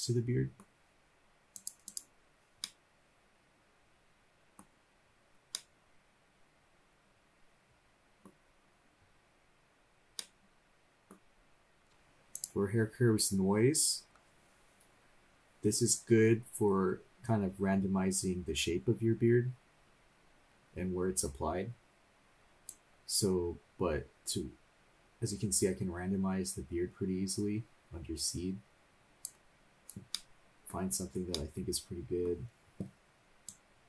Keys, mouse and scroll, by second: 1.6 click, 2.6-4.6 middle drag, 4.7 scroll up 1, 4.8-5.4 scroll down 2, 5.5-8.3 middle drag, 8.6 scroll down 1, 9.0 scroll up 1, 10.1 scroll up 1, 10.2 middle click, 12.3 click, 22.7-29.3 drag, 30.1 middle click, 31.1 scroll down 2, 31.3 middle click, 33.4-33.8 drag.